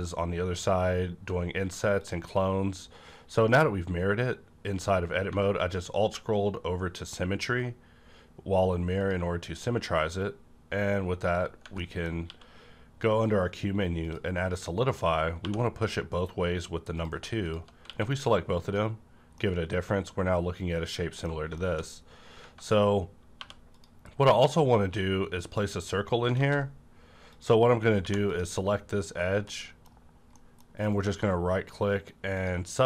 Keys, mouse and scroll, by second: 0.5-1.3 alt+scroll down 1, 2.0 shift+click, 5.4 shift+click, 5.4 scroll up 1, 6.0-7.1 alt+scroll down 1, 7.1-7.7 alt+scroll up 1, 9.0 click, 10.0 right click, 11.3 scroll down 1, 11.8 middle click, 12.3 q, 13.9 click, 15.4 2, 16.9 click, 17.0 click, 17.7 q, 18.5 click, 19.4-21.6 middle drag, 21.6 shift+middle click, 21.9 scroll up 1, 22.4 Tab, 23.4 2, 23.7 click, 24.3 scroll up 1, 24.8 q, 25.3 click, 26.4 ctrl+z, 27.2 click, 28.0 2, 28.2 click, 28.3 click, 29.5-30.8 middle drag, 30.8 right click, 32.4 click.